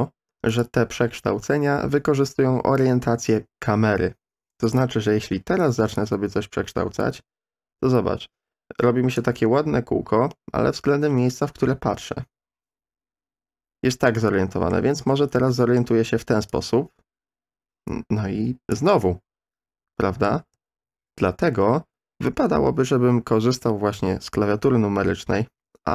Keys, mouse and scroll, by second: 0.5 click, 1.9-3.3 middle drag, 4.6 click, 5.9-9.2 drag, 12.0-14.7 middle drag, 15.0 ctrl+z, 15.3-15.8 middle drag, 16.5-18.7 drag, 19.0-20.3 middle drag, 20.8 ctrl+z.